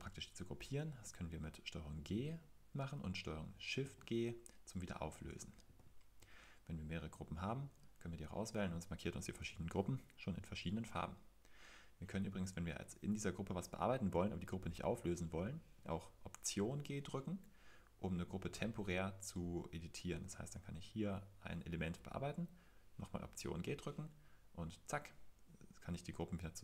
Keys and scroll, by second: 3.8 shift+super+g.